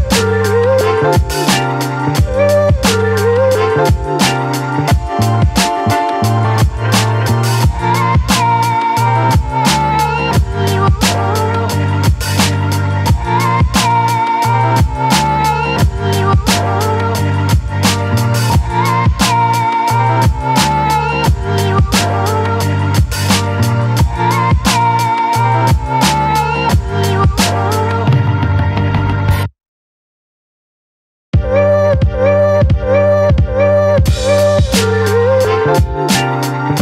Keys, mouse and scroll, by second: 3.5 click, 6.9 click, 8.5-8.8 scroll down 1, 12.4-13.1 scroll down 1, 16.9 ctrl+t, 18.1-21.4 alt+drag, 22.1 space, 22.4-24.8 ctrl+drag, 24.8 t, 26.0 click, 34.4 click, 36.5-36.8 scroll down 1.